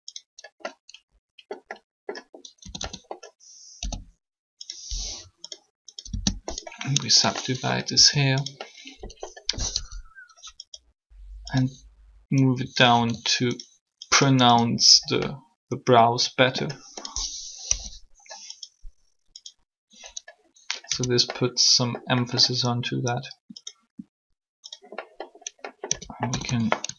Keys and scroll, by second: 2.6-3.6 typing, 6.0 Return, 7.9 shift+r, 9.7 1, 12.9 r, 17.6 3, 20.9 Tab, 25.9 Tab, 26.2-26.7 typing.